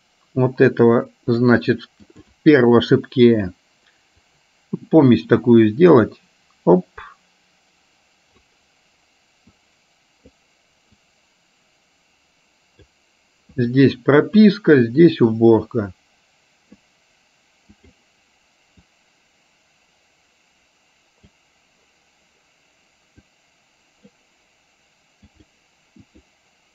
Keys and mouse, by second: 2.2 click, 4.4-8.7 drag, 9.8 click, 11.0-13.0 drag, 13.7 click, 14.4 click, 15.4-16.8 drag, 19.0-21.5 drag, 23.4 click, 25.4 click.